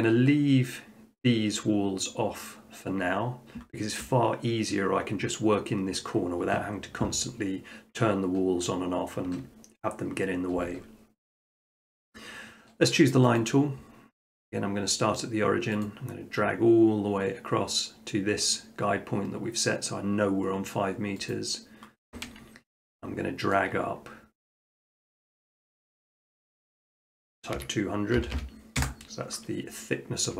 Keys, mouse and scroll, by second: 13.4-14.5 drag, 15.8 click, 21.3 click, 22.3 scroll, 23.6 shift+middle click, 27.6-28.2 typing, 28.8 Return, 30.0 middle click.